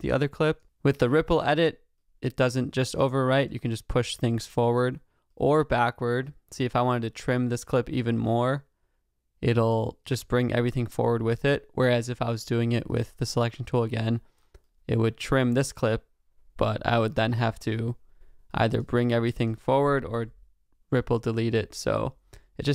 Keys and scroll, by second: 20.2 BackSpace.